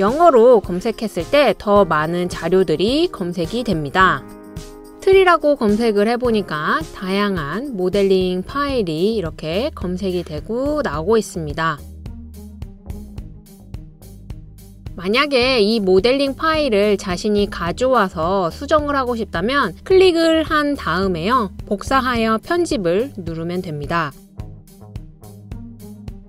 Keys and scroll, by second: 0.6-3.2 typing, 12.2 typing, 16.9 typing, 24.4 typing.